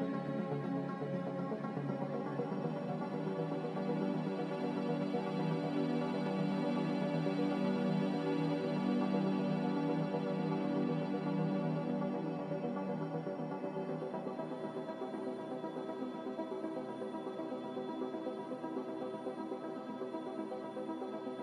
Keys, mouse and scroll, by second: 7.0 z, 8.7 5, 8.8-11.6 Return, 16.6 a, 20.6 9, 21.1 7.